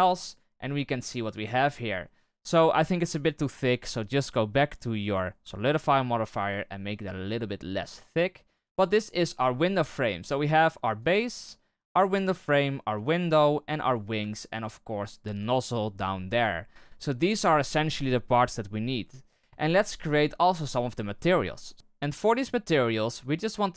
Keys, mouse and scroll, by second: 1.1-1.7 scroll up 5, 1.7-2.3 middle drag, 2.3 right click, 3.0-5.1 scroll up 13, 5.1-5.8 scroll down 1, 5.8-8.8 shift+drag, 8.9 right click, 9.2 middle drag, 9.5-9.9 scroll down 2, 9.9 middle click, 10.2 scroll down 1, 10.4 scroll up 1, 10.5-11.0 scroll down 1, 11.0-12.1 right drag, 12.9 right click, 13.9 right click, 14.2-15.4 shift+middle drag, 15.4-18.3 right drag, 21.7 right click.